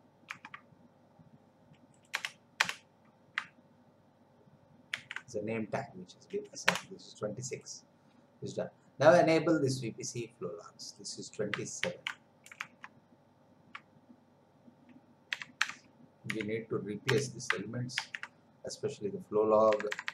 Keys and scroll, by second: 0.4 alt+Tab, 2.2 Return, 4.9 ctrl+v, 6.7 Return, 11.8 ctrl+c, 12.8 alt+Tab, 15.3 2, 17.1 Return, 18.0 ctrl+v, 19.7 BackSpace.